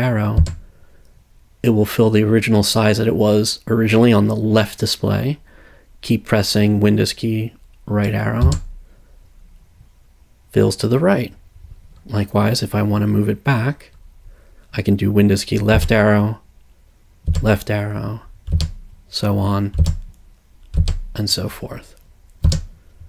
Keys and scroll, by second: 0.4 super+Right, 8.4 super+Right, 15.7 super+Left, 17.3 super+Left, 22.4 super+Right.